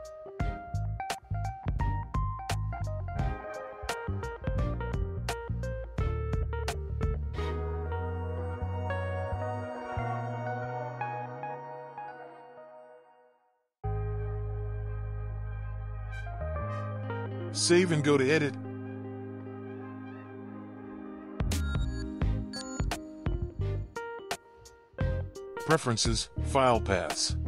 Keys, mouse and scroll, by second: 4.3 click, 5.6 click, 7.7-10.5 drag, 12.3-13.7 drag, 14.7 click, 18.1-21.3 drag, 24.7-27.4 drag.